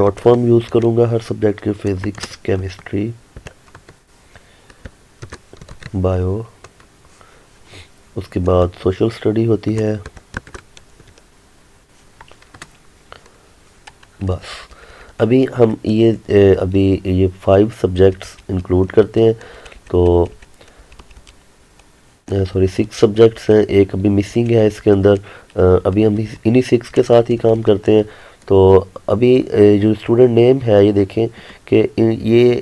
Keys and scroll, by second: 3.8 Tab, 6.7 Tab, 9.2 Tab, 12.6 Tab.